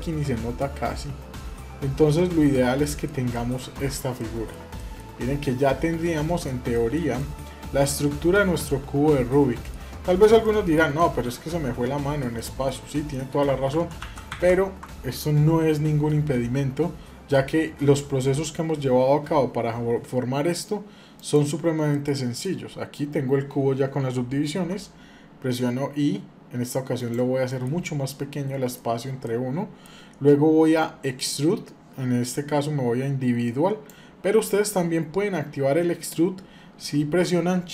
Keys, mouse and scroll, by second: 1.7 scroll down 1, 2.5 middle click, 3.5 Tab, 3.9 middle click, 4.5 shift+middle click, 5.0-6.3 middle drag, 6.5 shift+middle drag, 6.9-9.5 middle drag, 9.8 scroll up 2, 10.2-10.5 shift+middle drag, 10.8-11.1 middle drag, 12.2 shift+middle click, 12.5 scroll down 1, 12.9 middle click, 13.5 ctrl+z, 13.8 ctrl+z, 14.1 ctrl+z, 15.2-15.9 scroll down 1, 17.7 shift+middle click, 21.7 middle click, 24.3 i, 27.2 middle click, 27.6-28.5 scroll up 1, 28.5 middle click, 28.5 scroll up 1, 29.0-30.3 middle drag, 31.0-35.6 drag, 35.6-36.5 scroll down 2.